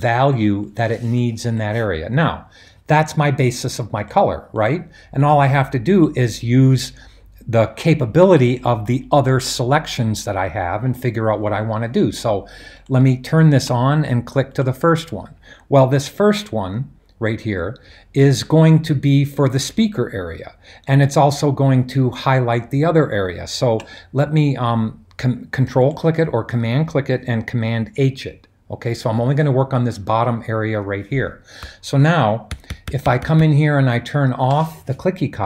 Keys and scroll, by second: 29.2 super+h, 31.6-33.3 typing.